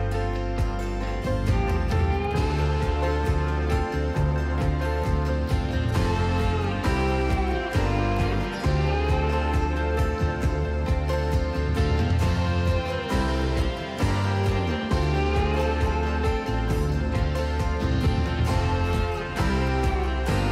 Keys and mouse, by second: 2.5 2, 3.3 F12.